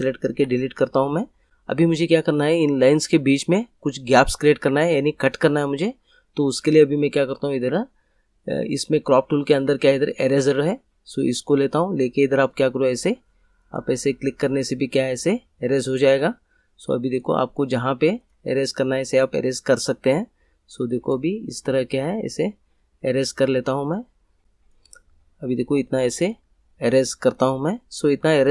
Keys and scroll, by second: 0.3 Delete, 1.5 Delete.